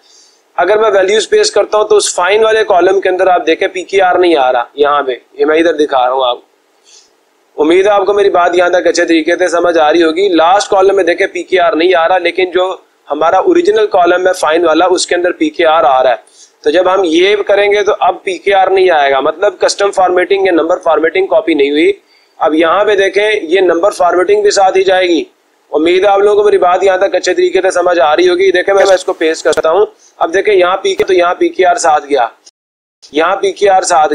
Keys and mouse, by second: 28.9-30.2 drag, 31.0 click, 32.2 click, 33.6 click.